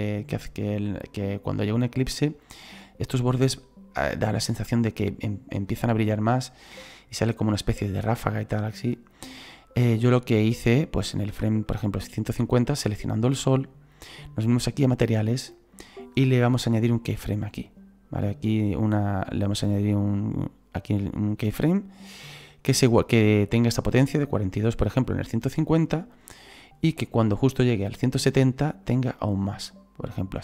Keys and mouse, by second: 9.7 click, 12.7 right click, 14.9 click, 18.2 click, 19.3 right click, 20.8 click, 25.9 click, 28.8 click.